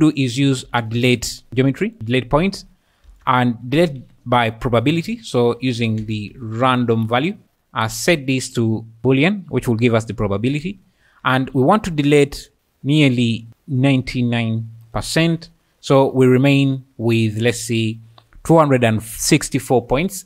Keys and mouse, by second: 1.9 click, 2.1 ctrl+shift+click, 3.1 shift+a, 5.6 BackSpace, 6.3 BackSpace, 8.6-9.1 drag, 10.1 click, 11.0-11.4 middle drag, 12.5-14.9 drag, 15.3-16.0 `.